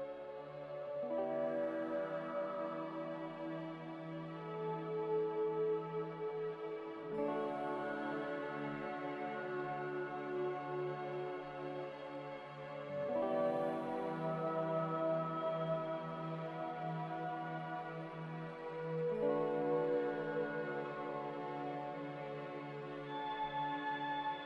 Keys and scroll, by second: 0.0 z, 1.3-5.0 typing, 12.5-13.3 typing, 17.2-18.0 typing, 19.5-22.7 typing.